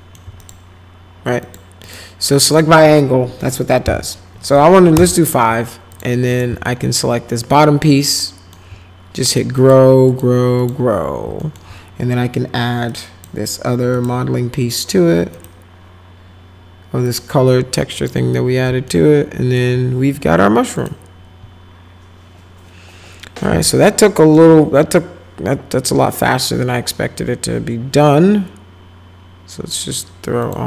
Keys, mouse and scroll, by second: 0.4 click, 1.4 click, 1.8 click, 2.3 click, 3.8 5, 5.9 click, 6.3 click, 6.6-8.5 alt+middle drag, 9.6 click, 10.1 click, 10.6 click, 11.4 alt+right click, 12.9 click, 13.9 click, 15.3 click, 17.0 click, 18.0 click, 18.9 alt+right click, 19.1 alt+middle click, 20.7 click, 24.0 alt+middle click, 30.4 click.